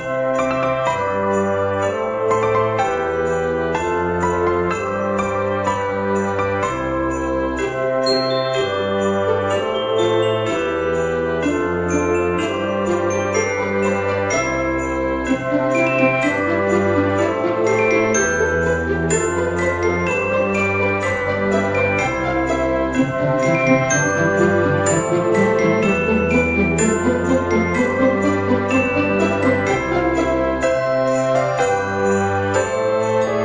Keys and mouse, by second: 0.6 click, 2.6 click, 3.4 click, 4.0 alt+z, 4.5 o, 8.6 click, 10.6 alt+z, 10.7 click, 11.4 alt+z, 12.2 alt+z, 12.3 click, 13.0 alt+z, 13.5 g, 13.7 z, 15.1 click, 15.5 Tab, 16.7 g, 16.9 x, 17.8 click, 18.2 shift+a, 19.2 click, 19.8 g, 19.9 z, 20.4 click, 20.9 s, 21.9 click, 22.1 g, 22.8 click, 24.0 s, 25.6 click, 26.5 g, 26.6 z, 27.1 click, 27.6 s, 28.6 click, 29.1 z, 29.6 click, 30.4 KP_3, 31.1 g, 31.5 y, 32.3 click, 33.0 KP_1.